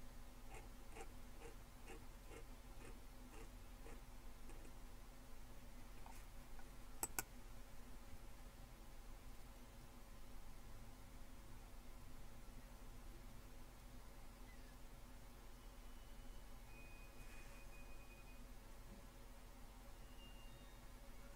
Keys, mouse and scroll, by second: 0.5-1.9 scroll up 1, 1.9-4.3 scroll up 4, 5.8-7.0 scroll down 1, 7.0-9.3 drag.